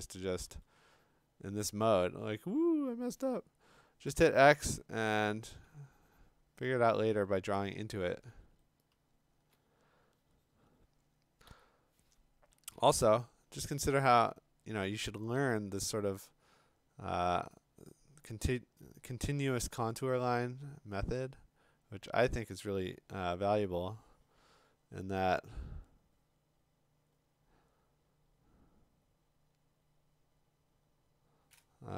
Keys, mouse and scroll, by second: 0.4 x, 4.1 x, 4.8-5.7 ], 7.6-8.2 [, 8.9 [, 9.4 [, 9.6 [, 11.5 x, 12.5 [, 12.8 [, 13.6 [.